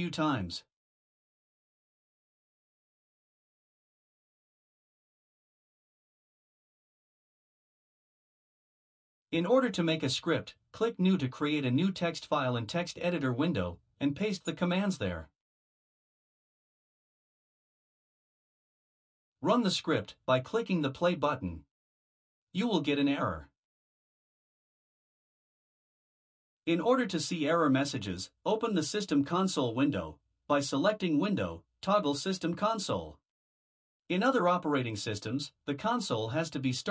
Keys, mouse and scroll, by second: 1.5 ctrl+v, 2.6 Return, 4.4 ctrl+v, 5.4 Return, 12.1 click, 15.5 ctrl+v, 17.9 click, 21.3 click, 29.7 click.